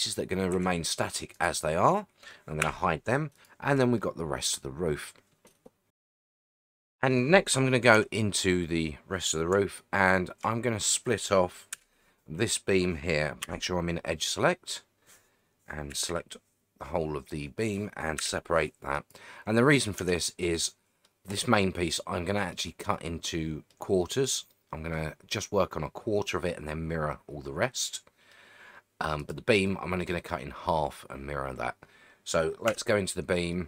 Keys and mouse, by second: 0.5 g, 1.3 right click, 2.6 h, 3.9-5.9 middle drag, 6.7 click, 7.9 Tab, 9.8 shift+middle click, 11.7 l, 13.4 2, 15.9 l, 18.2 p, 20.0 Tab, 20.4-21.0 middle drag, 21.3 click, 21.7-22.5 middle drag, 22.9-23.7 middle drag, 24.5-24.9 middle drag, 27.7-28.3 middle drag, 29.3-29.7 drag, 29.7-30.0 middle drag, 32.7 Tab, 33.5-33.6 middle drag.